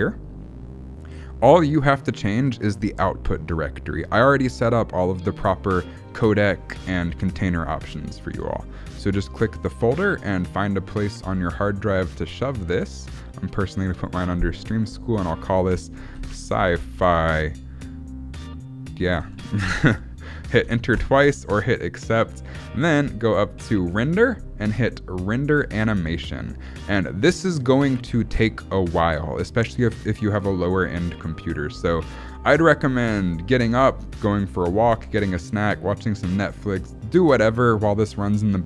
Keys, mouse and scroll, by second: 3.9-4.6 scroll down 9, 8.3 scroll up 4, 9.7 click, 23.9 click.